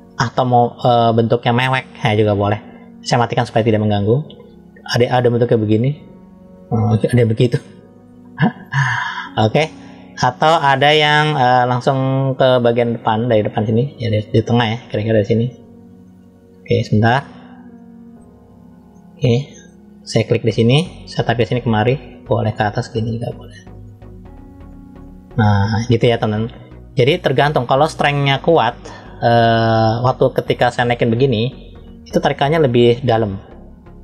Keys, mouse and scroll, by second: 0.1 ctrl+z, 2.3-3.7 drag, 4.8 click, 6.8-8.5 middle drag, 8.9 ctrl+z, 10.0-11.4 middle drag, 12.1 middle click, 15.8 scroll up 1, 15.9 middle click, 16.7-17.1 scroll down 1, 17.6 middle click, 18.1 scroll up 1, 18.8 shift+middle click, 21.2 click, 28.9 click, 30.5 click, 33.0 click.